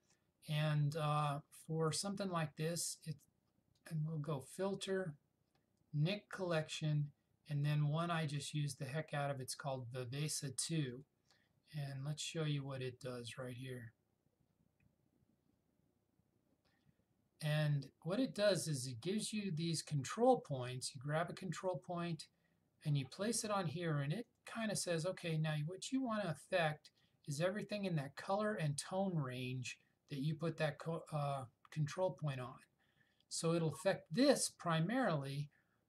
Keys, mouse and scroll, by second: 3.9 click, 11.0 click, 21.7 click, 24.4 click, 27.1-34.0 drag.